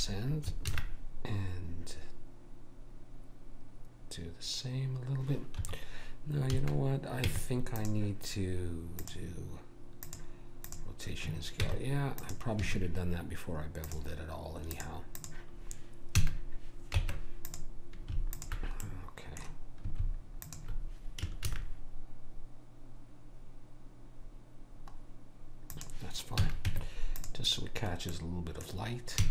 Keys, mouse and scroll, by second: 0.7 ctrl+b, 6.6 a, 7.2 Tab, 10.8 click, 11.6 Tab, 12.3 Tab, 12.7 a, 15.3 click, 16.2 a, 17.0 ctrl+Tab, 18.3-19.4 drag, 18.9 middle click, 21.5 ctrl+b, 26.4 a, 26.6 Tab, 28.1-29.3 middle drag, 29.2 a.